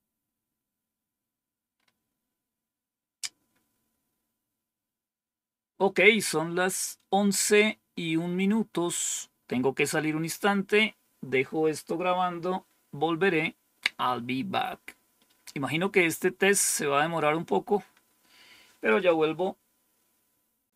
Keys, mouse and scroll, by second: 7.8-8.7 scroll down 2, 8.7-9.5 scroll down 1, 9.9-10.8 scroll down 2, 16.8-17.6 scroll down 2, 20.5 click.